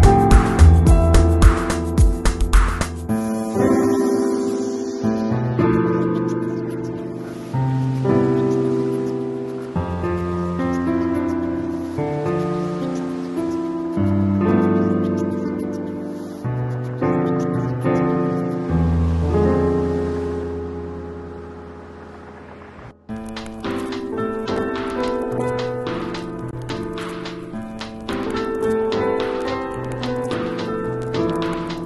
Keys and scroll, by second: 23.5 shift+super+g, 26.7 shift+super+g.